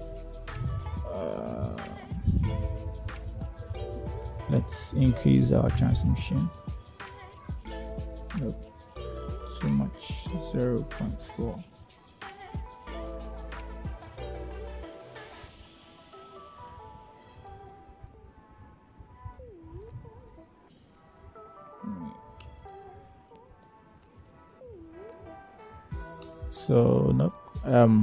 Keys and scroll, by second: 9.8 0, 10.0 ., 10.8 4, 11.1 Return.